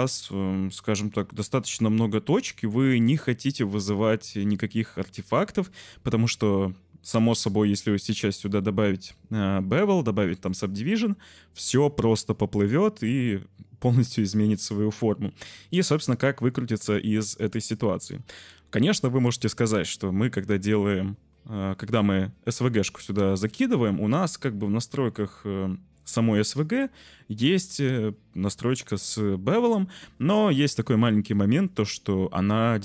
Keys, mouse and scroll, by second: 1.3 shift+click, 1.6 Tab, 2.7 middle click, 2.8 Tab, 3.2 shift+middle click, 3.7 middle click, 4.0 middle click, 8.5-10.5 middle drag.